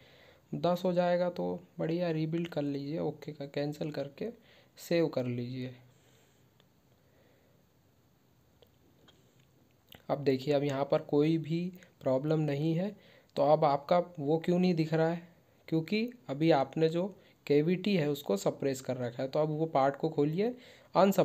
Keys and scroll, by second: 0.6 ctrl+q.